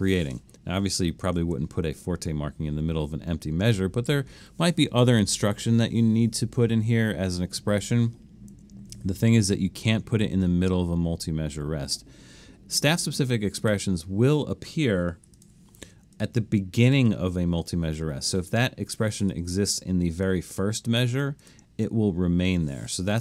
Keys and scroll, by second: 1.4 super+z, 11.8 BackSpace, 15.3 4, 15.7 Escape.